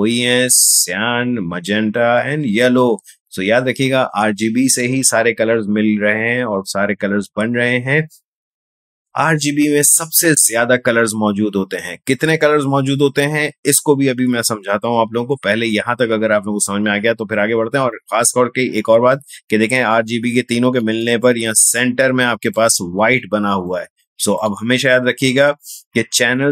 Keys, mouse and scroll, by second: 19.7 space, 21.2-26.5 ctrl+drag.